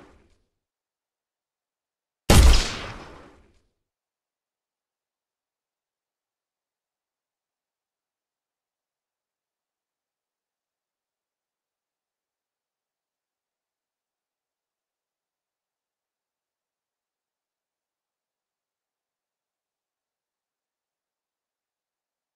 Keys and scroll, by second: 0.3 w, 5.0 Escape.